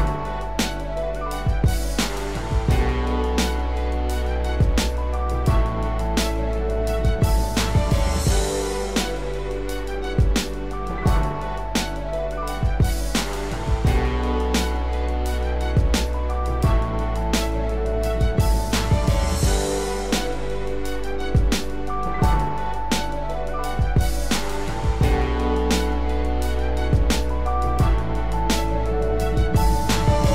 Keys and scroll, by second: 29.7 ctrl+0.